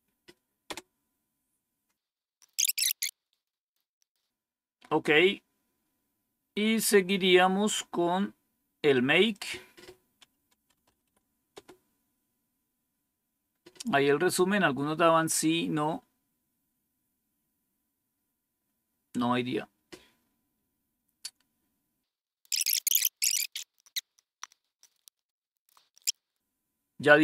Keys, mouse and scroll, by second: 1.5 Return, 2.1 scroll down 1, 5.7 scroll down 2, 6.5 scroll up 1, 7.6-8.0 scroll down 2, 9.2-10.4 drag, 10.1-11.4 typing, 18.4-22.1 scroll down 1, 22.1 scroll down 1, 26.1 click, 26.1 Up, 26.3 Up, 26.3 Down.